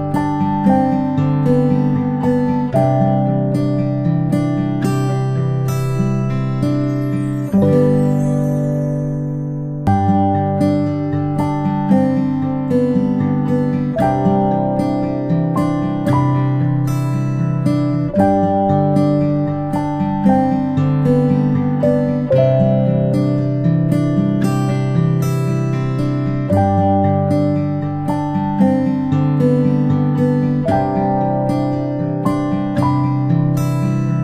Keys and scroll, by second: 3.2 ctrl+space, 3.4 ctrl+space.